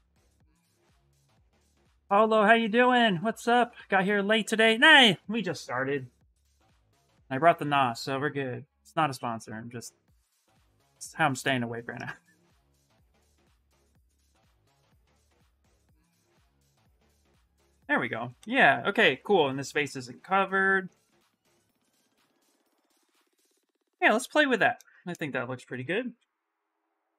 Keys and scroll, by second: 25.6 s.